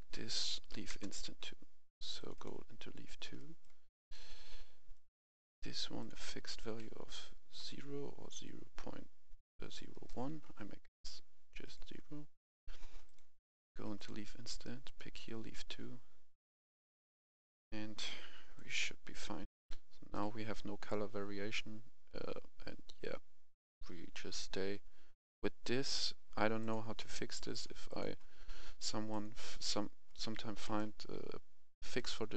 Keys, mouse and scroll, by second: 0.3 Right, 0.7 typing, 0.9 Return, 2.2 click, 3.4 right click, 4.0 click, 4.9 right click, 6.0 click, 7.6 0, 9.9 Return, 11.6-19.3 drag, 19.5 F10, 20.1-27.8 drag, 30.0 right click, 31.9 click.